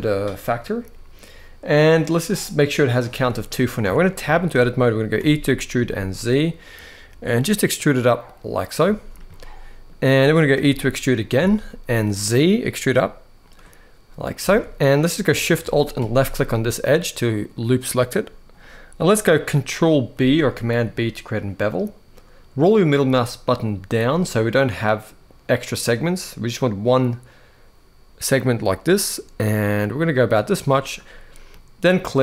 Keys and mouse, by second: 3.0 middle click, 3.5 Tab, 4.0 shift+middle click, 4.9 e, 5.5 z, 8.3 click, 8.7 shift+middle click, 9.0 middle click, 10.3 e, 11.1 z, 13.2 click, 14.2 alt+a, 15.7 alt+shift+click, 16.2-17.2 middle drag, 19.9 ctrl+b, 31.3 middle click.